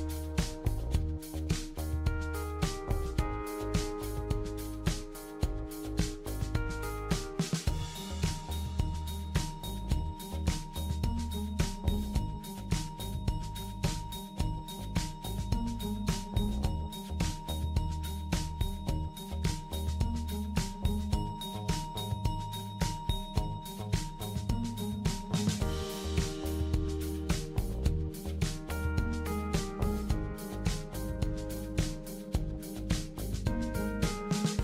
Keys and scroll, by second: 10.5-11.4 typing, 13.8-14.8 typing, 17.2-20.4 typing, 22.6 typing.